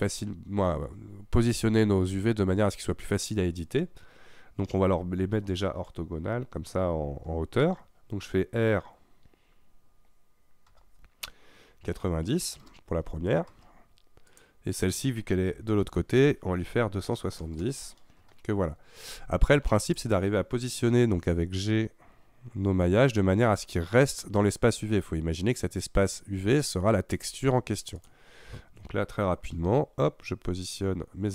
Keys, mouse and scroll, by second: 7.7 KP_3, 10.8 r, 14.3 click, 15.9 r, 19.9 click, 20.9 g, 28.0 click, 29.6 g.